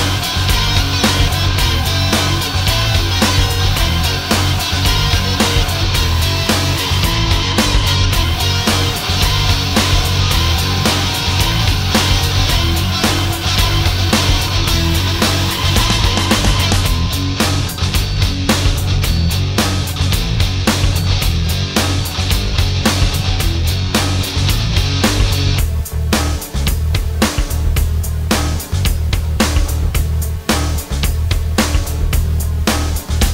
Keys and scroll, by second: 5.4 ctrl+shift+a, 7.3 space, 25.9 alt+space, 27.2 space.